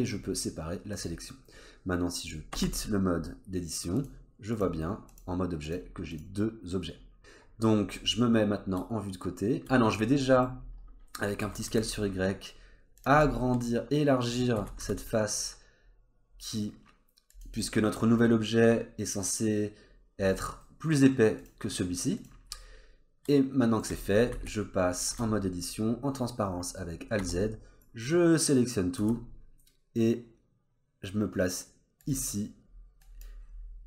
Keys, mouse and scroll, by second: 2.5 Tab, 4.0 click, 4.5 click, 5.1 click, 5.6 click, 6.9-8.2 scroll down 2, 8.2 middle click, 10.6-11.3 scroll up 3, 11.4 s, 13.2 middle click, 14.6 s, 17.6 middle click, 20.3-20.6 scroll down 2, 20.6 middle click, 21.0-21.4 scroll up 1, 21.4 click, 22.2 click, 22.5 middle click, 24.1 scroll up 2, 24.3 Tab, 25.1 alt+z, 27.2 1, 27.8 click, 29.0 g, 33.0 click, 33.4-33.8 scroll down 2.